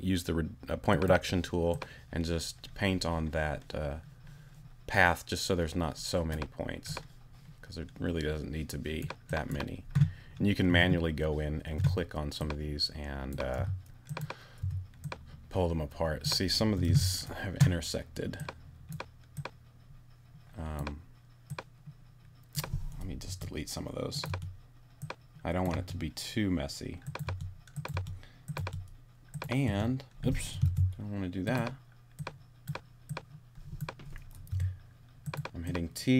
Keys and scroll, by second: 10.7 t, 13.6 t, 16.8 super+z, 23.2 BackSpace, 25.7 BackSpace, 27.2 BackSpace, 30.6 super+BackSpace, 31.7 super+z, 34.5 t.